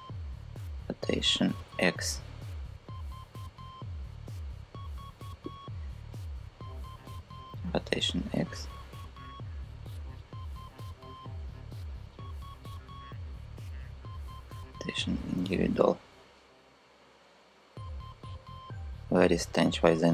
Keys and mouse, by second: 0.2 r, 1.3 x, 5.1 click, 6.1 click, 7.3 r, 7.6 x, 13.7 click, 15.0 r, 15.4 x.